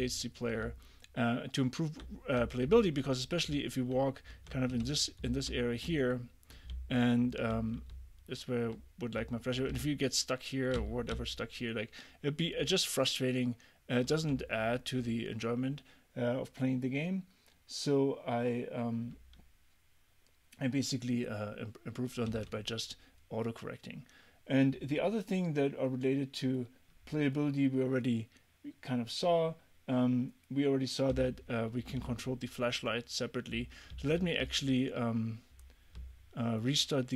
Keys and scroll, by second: 0.2 a, 0.7 w, 2.2-6.8 typing, 7.9 w, 9.2 a, 9.7 w, 10.8 d, 11.2 w, 22.3 a, 32.0 d, 33.9 d, 34.5 w, 36.0 w.